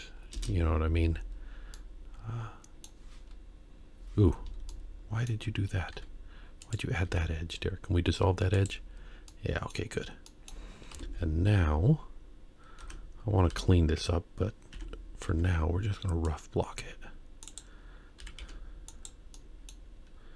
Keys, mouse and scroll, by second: 1.7-2.9 middle drag, 4.7 middle click, 5.9 2, 6.7 click, 7.1 x, 9.3 middle click, 10.3 middle click, 11.0 KP_1, 11.6-12.8 scroll down 1, 12.8 Tab, 13.5 Tab, 14.7 1, 15.3 c, 18.2 g, 19.3 middle click.